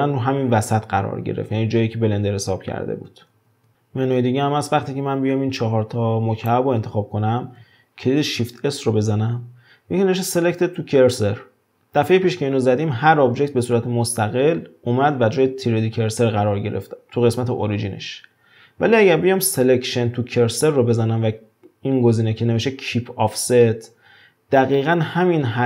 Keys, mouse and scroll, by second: 3.3 shift+s, 3.7-4.0 middle drag, 4.7 drag, 8.3 shift+s.